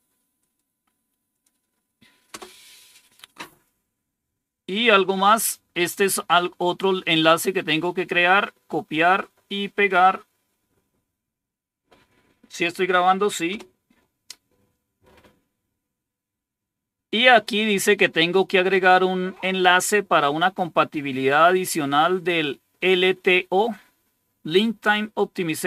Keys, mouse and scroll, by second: 0.3 right click, 1.2 click, 2.2 Return, 3.9 scroll down 2, 6.0-7.3 drag, 7.9 right click, 8.9 click, 10.2 right click, 11.2 click, 13.4 Return.